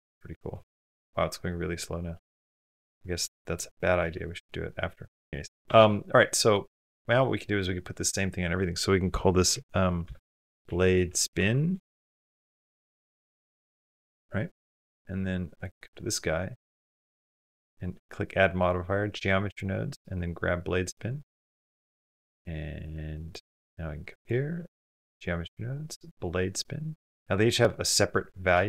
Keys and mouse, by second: 1.3 space, 2.7 click, 5.3 click, 5.3 space, 6.2 click, 8.0-10.0 drag, 11.7 BackSpace, 12.0 BackSpace, 12.2 BackSpace, 15.5 click, 17.1 click, 17.7-18.5 drag, 19.5 click, 21.0 click, 22.6 click, 23.1 click, 24.0 click, 25.5 click.